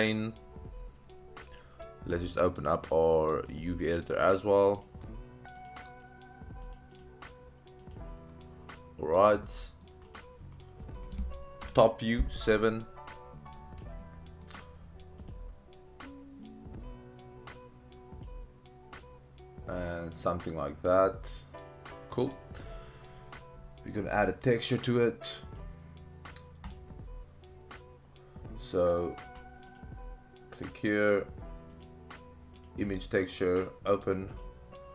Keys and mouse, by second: 3.5-4.9 drag, 5.6-6.8 drag, 7.1-8.0 drag, 9.4-9.8 middle drag, 10.1 click, 11.0 middle click, 11.6 KP_7, 14.0 shift+middle click, 15.2 click, 16.5-18.2 drag, 20.2-22.2 drag, 29.7 click, 31.9 click.